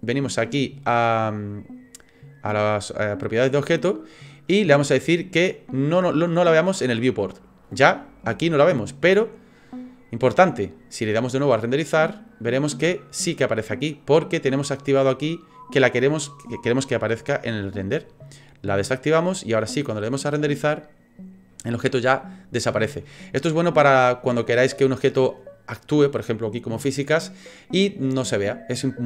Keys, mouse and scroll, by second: 3.5 click, 7.4 click, 11.6 click, 11.9 click, 18.8 click, 19.9 click.